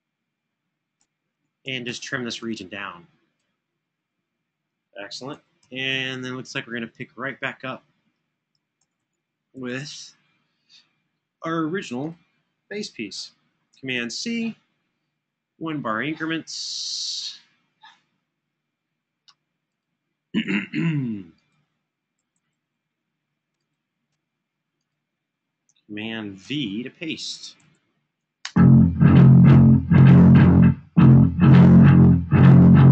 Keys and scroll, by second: 0.3 Escape, 0.8 Escape, 1.1 Escape, 1.4 Escape, 3.6 Escape, 5.0 super+[, 5.4 super+[, 8.8 super+[, 11.2 Escape, 11.2 Escape, 13.7 super+c, 22.0 super+], 22.3 super+], 26.2 super+v, 27.3 super+[, 28.2 space, 31.3 super+d.